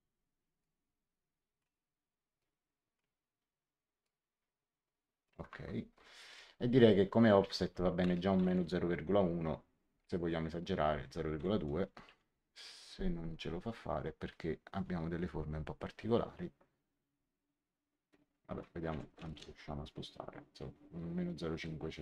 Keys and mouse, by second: 0.5 shift+click, 2.3 shift+click, 4.0 shift+click, 7.9 KP_Subtract, 8.1 KP_0, 8.3 KP_Decimal, 8.5 KP_1, 11.7-12.5 typing, 18.8 BackSpace, 19.2 KP_0, 19.2 KP_0, 19.3 KP_5.